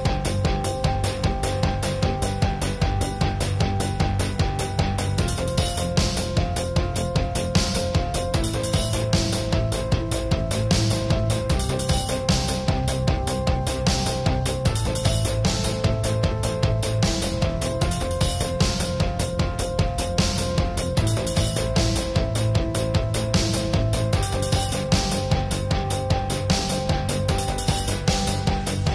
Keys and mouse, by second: 0.3-2.2 middle drag, 2.2 ctrl+s, 2.2-2.7 drag, 2.7-5.5 middle drag, 5.5-5.9 drag, 5.5 ctrl+s, 7.4 a, 7.5 a, 7.7 ctrl+s, 8.0 shift+space, 8.3 alt+s, 9.4 ctrl+s, 10.2 alt+s, 10.8-11.1 middle drag, 11.2 KP_7, 11.3 KP_5, 11.6 middle click, 11.7-12.8 drag, 12.6 KP_1, 13.0 middle drag, 13.2-14.1 drag, 13.9 ctrl+s, 14.1-15.0 middle drag, 14.8 ctrl+s, 15.0 ctrl+s, 15.0 drag, 16.6 KP_0, 17.6 ctrl+alt+KP_0, 17.9 click, 18.2 right click, 18.2 KP_7, 19.2 click, 19.3 ctrl+alt+KP_0, 19.8-21.4 drag, 21.8 KP_7, 22.2 middle click, 22.4-22.9 drag, 23.0 click, 23.2 middle click, 23.3 click, 23.6-24.0 drag, 24.2-24.6 drag, 24.9-25.4 drag, 25.5-26.4 drag, 26.2 ctrl+s, 27.4-28.5 drag, 28.1 ctrl+s, 28.5 KP_1, 28.7 click.